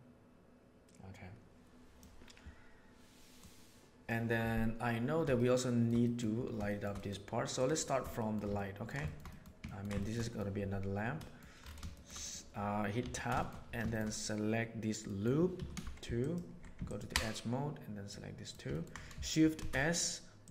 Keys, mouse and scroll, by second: 3.3-4.0 right drag, 5.3-5.7 shift+middle drag, 6.0 middle click, 6.6 shift+middle drag, 6.9 middle click, 7.5 click, 8.1 shift+middle click, 8.5-8.9 ctrl+middle drag, 9.0 shift+middle click, 9.3 middle drag, 9.6 ctrl+middle drag, 9.9 shift+middle click, 10.2 middle click, 11.1 middle click, 11.9-12.3 shift+middle drag, 12.9 Tab, 13.3 middle click, 15.0 middle click, 15.5 2, 16.8 alt+click, 18.1 middle click, 18.7 ctrl+middle click, 19.5 shift+s.